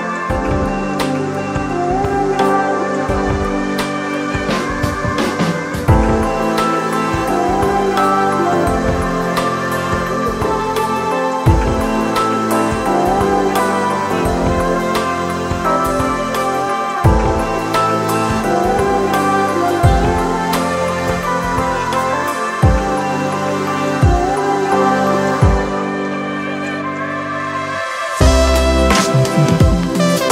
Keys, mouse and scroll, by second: 7.3 ctrl+z, 13.5 [, 15.8 ], 22.2 ], 27.8 [.